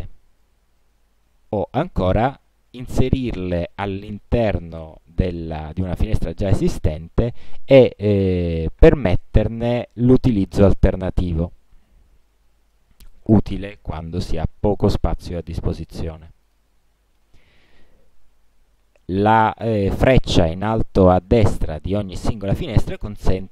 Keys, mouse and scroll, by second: 0.6-1.8 drag, 3.6-7.9 drag, 9.8 click, 10.4 click, 11.1 click, 12.9 click, 14.4 click, 15.1 click, 15.7 click, 16.6 click, 23.1 click.